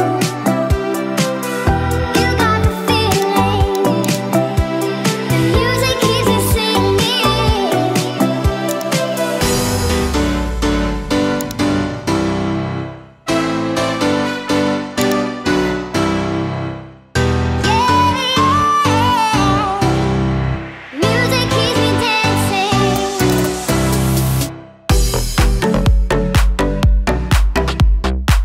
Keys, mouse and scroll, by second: 0.0-16.3 drag, 16.4 space, 21.7 space, 22.2 KP_1, 23.3 click.